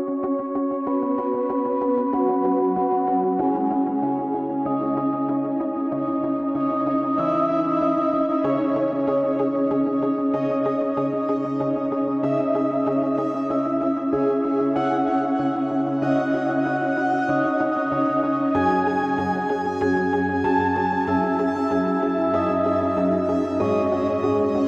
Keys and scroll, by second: 1.4 a, 1.7 b, 2.8 s, 3.1 x, 5.8 ctrl+r, 10.9 1, 12.3 shift+Tab, 13.5 a, 13.7 Tab, 14.2 ctrl+a, 18.7 ctrl+p.